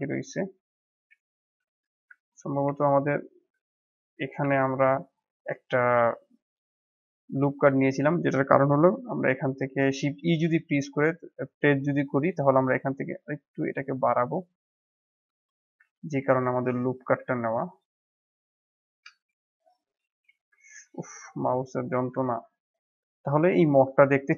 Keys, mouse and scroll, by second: 0.4 middle click, 0.9 shift+z, 1.2 middle click, 1.6 scroll down 6, 2.1 Tab, 2.6 Tab, 3.0 click, 3.6 Tab, 3.9 click, 4.4 Tab, 5.1 scroll up 1, 5.4-6.4 middle drag, 6.4 click, 6.7-7.4 scroll up 1, 7.4 alt+click, 9.1 alt+e, 16.2-16.9 scroll up 2, 16.9 ctrl+r, 20.6 ctrl+r, 22.1 Tab, 22.4 scroll down 1, 22.7-23.9 middle drag, 23.9-24.3 scroll up 1, 24.3 click.